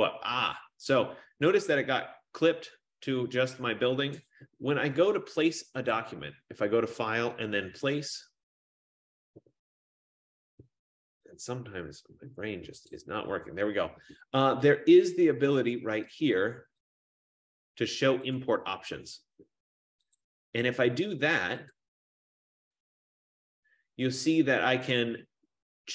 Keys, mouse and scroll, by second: 4.5 BackSpace, 6.2 click, 6.8-11.1 drag, 12.9 click, 17.0 click, 18.5 click, 20.3 click, 21.9 click.